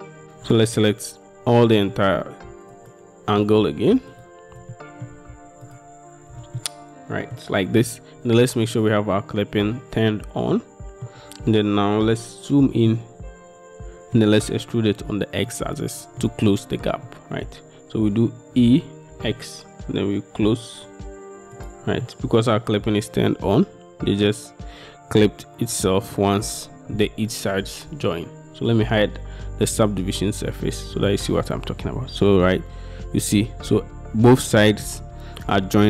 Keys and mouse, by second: 0.3 ctrl+z, 1.8 shift+click, 2.9 alt+click, 4.8 click, 5.7 alt+shift+click, 6.6 middle click, 10.6 middle click, 13.1-14.2 middle drag, 15.6 middle click, 17.1 middle click, 18.7 e, 19.2 x, 22.1 middle click, 23.6 middle click, 29.7 middle click, 30.6 middle click.